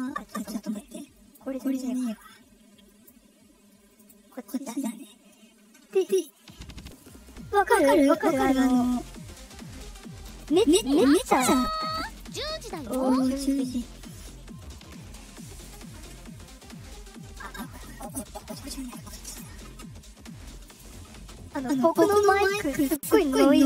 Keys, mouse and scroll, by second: 1.9 click, 3.7 click, 11.8 click, 12.3 scroll down 1, 15.4 click, 17.8 click, 19.0 click, 20.4 click.